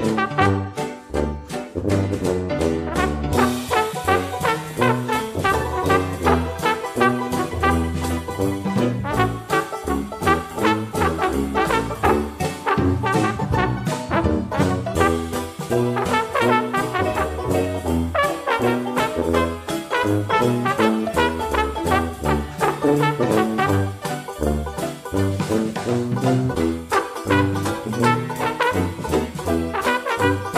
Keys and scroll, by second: 23.3 ctrl+d.